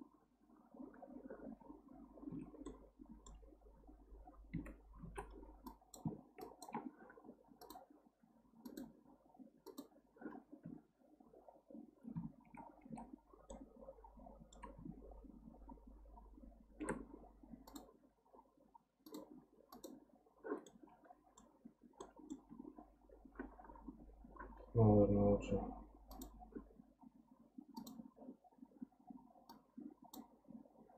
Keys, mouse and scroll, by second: 1.5 scroll up 1, 2.3 Tab, 2.6-4.5 middle drag, 4.5 1, 5.0 alt+z, 5.6 click, 6.4 shift+click, 7.6 click, 8.6 click, 9.7 click, 10.6 Tab, 13.1 ctrl+z, 13.5-16.6 middle drag, 17.7 click, 19.1-20.6 drag, 20.6-25.0 middle drag, 26.1 click, 27.9-29.1 drag, 29.5-30.1 drag.